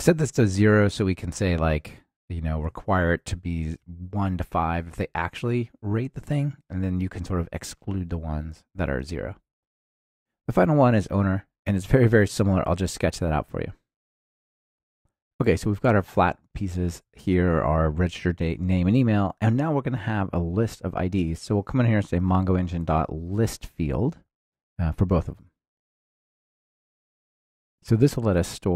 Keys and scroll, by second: 22.3 Return, 24.4 ctrl+alt+shift+Left, 25.5 Return, 27.4 Escape.